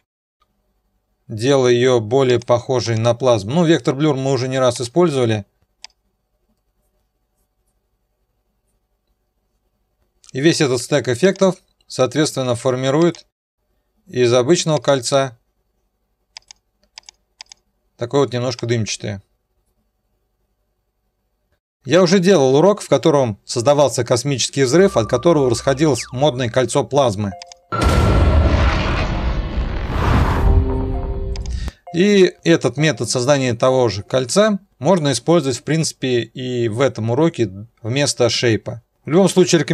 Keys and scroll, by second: 0.2 alt+/, 11.4 F4.